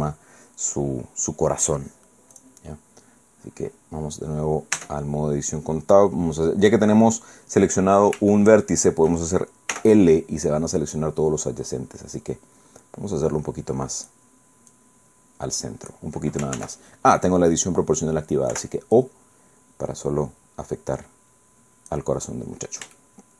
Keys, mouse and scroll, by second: 2.4 right click, 4.8 Tab, 7.0 middle click, 8.3 shift+right click, 9.7 l, 11.0-14.3 drag, 14.7-16.1 drag, 16.6 ctrl+z, 18.5 o, 19.0-22.1 drag, 22.2-22.5 scroll down 2, 23.0-23.3 shift+middle drag.